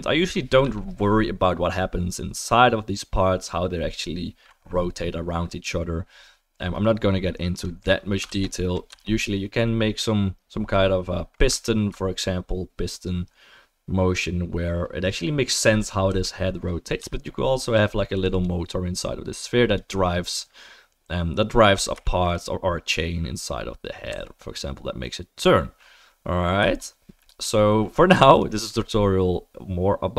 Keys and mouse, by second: 7.5 click, 7.8-8.4 middle drag, 8.3 ctrl+s, 8.9-11.7 right drag, 11.7 alt+drag, 11.8-28.3 alt+right drag, 15.9 drag, 16.1 r, 18.1 click, 18.3 click, 22.0 shift+middle drag, 24.1 r, 28.3 middle click, 28.4-30.1 right drag.